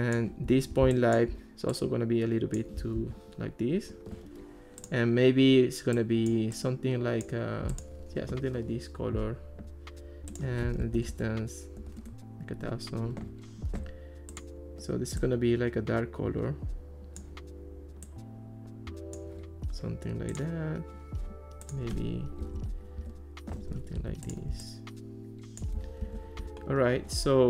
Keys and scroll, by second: 3.0 alt+r, 10.6-11.5 typing, 12.0 Return, 22.2-23.2 typing, 26.0 alt+r.